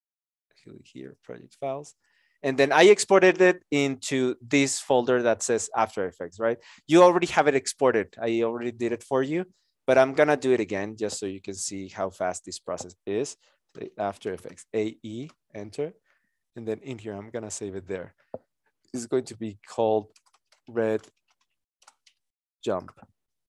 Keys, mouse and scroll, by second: 11.5 ctrl+shift+n, 13.8 shift+a, 14.1 shift+e, 15.2 Return, 19.1 shift+j, 20.2-23.1 typing.